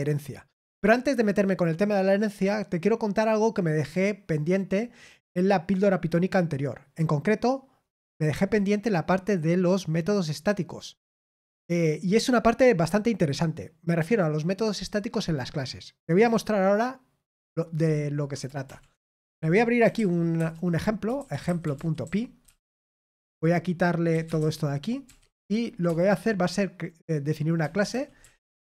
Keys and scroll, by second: 18.6 super+l, 19.2 super+l, 19.5-23.3 typing, 25.5-26.3 typing.